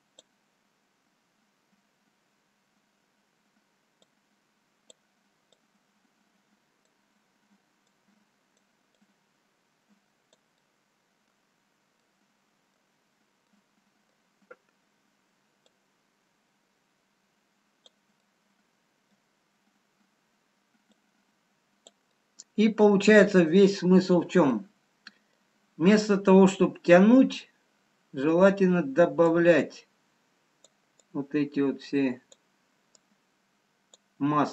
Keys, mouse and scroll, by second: 1.2 click, 1.2-1.8 scroll down 2, 4.1 click, 4.1-4.4 scroll down 1, 5.7 click, 10.9 click, 10.9 middle click, 11.7 scroll up 1, 12.0 middle click, 13.1-14.1 scroll up 3, 14.1 middle click, 15.8 click, 18.4 middle click, 19.6-20.6 scroll down 1, 21.0 click, 22.1 middle click, 23.3 middle click, 24.3-24.7 scroll up 1, 24.9 middle click, 29.3 click, 31.0 click.